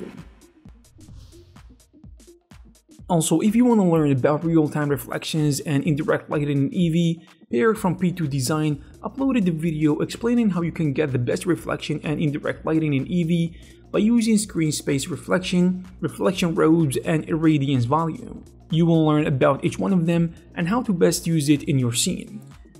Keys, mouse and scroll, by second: 0.9 click, 1.1 click, 1.3 middle click, 1.8 shift+middle click, 2.0 click, 2.7 g, 3.0 middle click, 4.2 middle click, 4.8 g, 6.0 s, 6.5 scroll down 1, 6.6 middle click, 7.3-7.9 scroll down 2, 7.9 middle click, 8.9 middle click, 9.5 click, 10.0 scroll down 6, 10.2 middle click, 11.1 scroll up 3, 11.1 middle click, 11.6 g, 12.2 click, 13.3 click, 13.5 click.